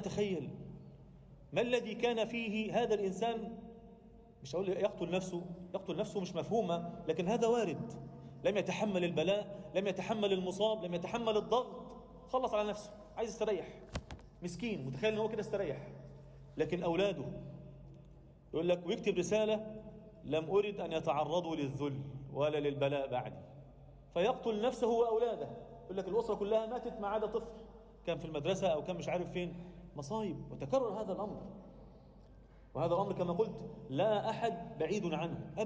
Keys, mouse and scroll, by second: 0.8 Tab, 1.1 Tab, 11.5 z, 11.8 a, 12.7 alt+middle click, 13.9 KP_1, 15.2 z, 15.6 alt+middle click, 16.9 middle click, 18.1 alt+shift+middle click, 18.6 z, 20.8 alt+middle click, 21.4 alt+shift+middle click, 21.9 a, 22.4 alt+a, 23.0 b, 24.3 z, 24.6-25.8 scroll up 1, 25.8 g, 27.2 e, 30.7-31.5 scroll down 2, 30.9 Tab, 31.5-32.1 scroll up 1, 32.1-32.8 scroll up 2, 33.5 drag, 33.8-34.8 drag, 35.3 ctrl+a.